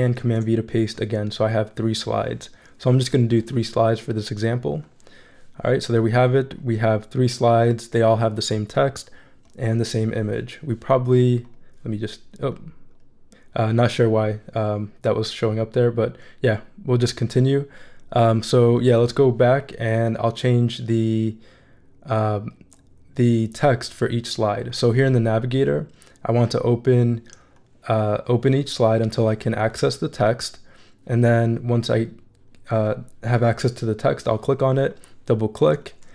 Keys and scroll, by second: 0.2 super+v.